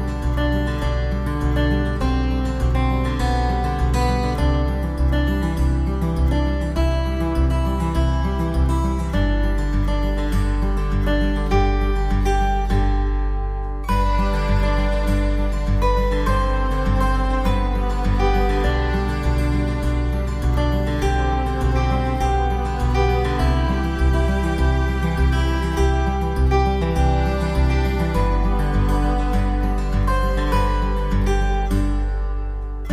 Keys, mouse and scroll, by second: 0.5 ctrl+z, 0.5 middle click, 1.3 middle click, 1.8-2.1 scroll up 3, 2.3 shift+middle click, 3.1-3.4 scroll up 2, 4.1 shift+right click, 6.9 f, 8.0 right click, 9.1-10.8 typing, 11.2 middle click, 12.9 shift+right click, 13.6 middle click, 14.8 shift+right click, 15.6 f, 15.9 middle click, 17.1 right click, 18.5 shift+right click, 21.1 f, 21.4 middle click, 22.3 ctrl+s, 23.0 Tab, 23.3 scroll down 3, 23.5 middle click, 24.9 middle click, 26.1 ctrl+s, 26.6 middle click, 29.6 click.